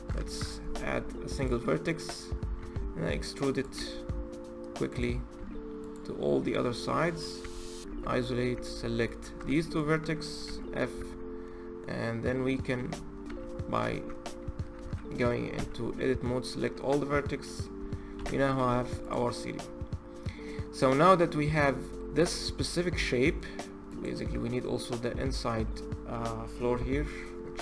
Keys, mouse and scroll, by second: 0.0 shift+a, 2.4 e, 3.5 e, 5.1 e, 7.2 Tab, 7.6 KP_Divide, 8.3 Tab, 8.8 click, 10.2 f, 10.7 Tab, 11.2-13.0 middle drag, 13.0 f, 13.7 Tab, 14.6 a, 15.3 f, 16.0-17.6 middle drag, 17.6 Tab, 17.9 KP_Divide, 18.8 click, 19.1-21.1 middle drag, 21.1-21.4 scroll down 2, 21.4-22.1 middle drag, 22.1-22.5 scroll up 3, 22.5-23.7 middle drag, 23.7 click, 24.4-27.5 scroll up 3.